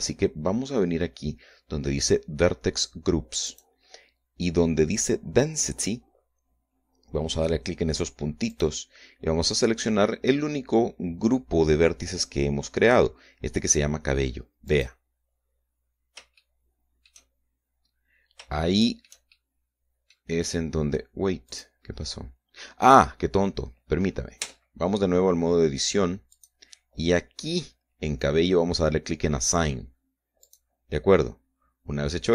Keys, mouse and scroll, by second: 1.1-1.6 scroll down 1, 4.2 click, 4.7-5.1 scroll down 1, 9.2 click, 15.4 click, 17.1 shift+middle click, 18.4-19.0 scroll up 2, 19.3 shift+middle click, 20.0 shift+middle click, 21.2-21.7 scroll up 2, 22.2 click, 25.2 Tab, 27.0 click, 31.2 click.